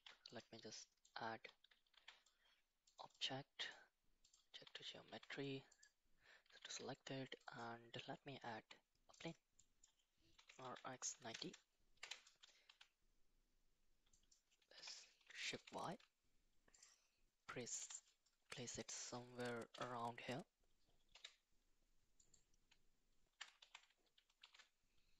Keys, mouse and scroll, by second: 0.8 middle drag, 2.9 click, 3.2-4.3 drag, 5.1 shift+s, 6.6 shift+a, 9.6-9.9 middle drag, 10.4 r, 12.7 s, 14.8 g, 17.8 KP_1, 18.6-19.1 shift+middle drag, 19.7 g, 23.7 g.